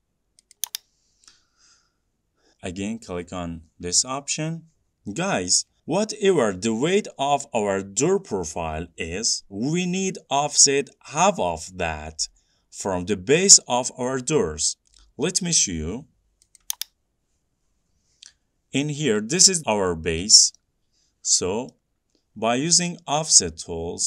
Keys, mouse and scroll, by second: 0.8 click, 9.5 click, 16.8 click, 19.2-19.7 scroll, 20.1 scroll, 20.2 middle click, 22.0 middle click, 22.1-22.5 scroll.